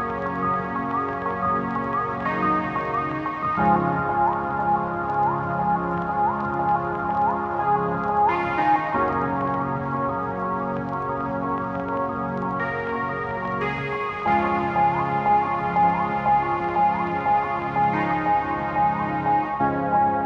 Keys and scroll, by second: 6.0 Tab, 9.1 Tab, 11.0 ctrl+z.